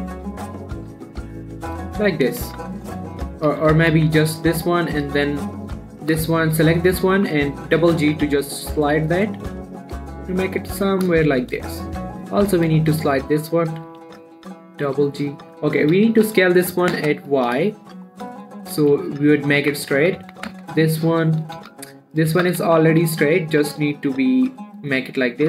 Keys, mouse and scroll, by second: 1.4 x, 2.2-2.6 scroll up 1, 2.9 ctrl+z, 3.5 ctrl+click, 4.0 z, 4.4 x, 5.6 click, 6.7 alt+shift+click, 8.2 g, 8.4 g, 11.2 click, 11.5 scroll down 2, 11.6 shift+middle click, 11.9-12.4 scroll up 1, 12.4 click, 13.0 click, 13.4 alt+shift+click, 14.2 g, 14.4 g, 15.6 click, 16.2 s, 16.5 y, 18.1 shift+middle click, 18.4-19.2 scroll up 1, 19.2 click, 19.5 alt+shift+click, 20.4 s, 20.6 x, 22.0-23.8 typing, 22.3 click, 25.0 click, 25.3 scroll down 1.